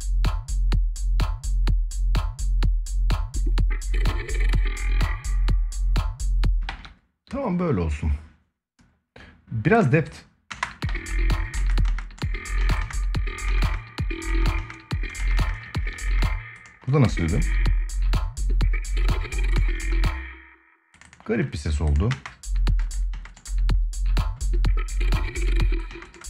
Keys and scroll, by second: 5.8 ctrl+s, 6.0 space, 10.2 space, 10.6 ctrl+s, 11.3 space, 15.5 ctrl+s, 15.8 space, 19.6 space, 21.9 space, 25.2 space.